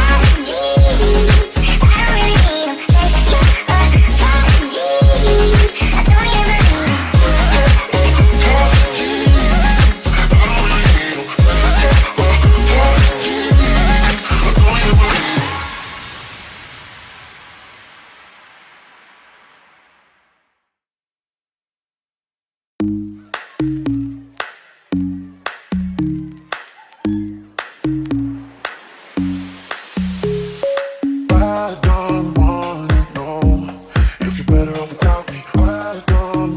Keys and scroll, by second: 28.6 8, 28.9 Return.